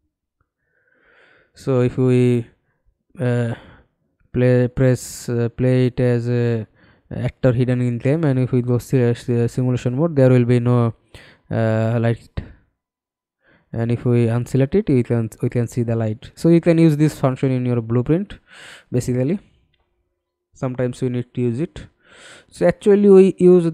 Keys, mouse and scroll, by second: 3.2 middle click, 4.4 Escape, 10.3 middle click, 12.5 Escape, 13.6-14.3 scroll down 2, 14.5-15.7 scroll down 7, 15.8-20.3 scroll up 30, 20.3 scroll up 2, 21.3 f, 21.8 alt+click.